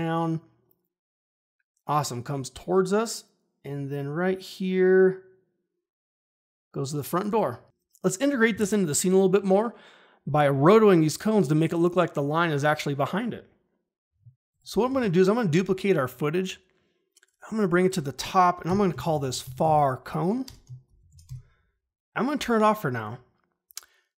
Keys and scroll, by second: 7.6 ctrl+`, 14.8 ctrl+d, 18.6 Return, 18.7-21.6 typing.